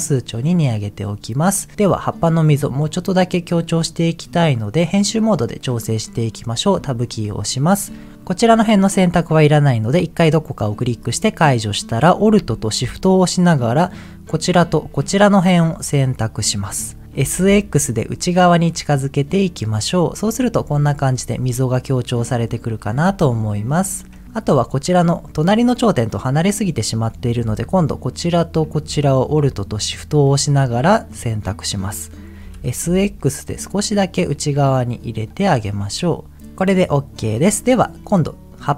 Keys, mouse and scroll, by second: 0.0 click, 0.9 middle click, 1.7 Tab, 2.2 scroll down 1, 2.5-3.8 middle drag, 3.8-4.8 scroll down 1, 5.7 middle click, 6.2 Tab, 10.9 click, 13.6 alt+shift+click, 14.5 alt+shift+click, 15.9 middle click, 16.3 scroll up 2, 16.9 scroll down 1, 17.1 right click, 17.1 s, 17.4 x, 20.1 click, 20.5 Tab, 21.5-23.0 middle drag, 23.1 Tab, 23.7 middle click, 24.6 middle click, 27.9 alt+click, 29.0 alt+shift+click, 30.3 middle click, 32.5 s, 32.8 x, 35.3 click, 35.7 middle click, 36.7 middle click, 37.4 middle click.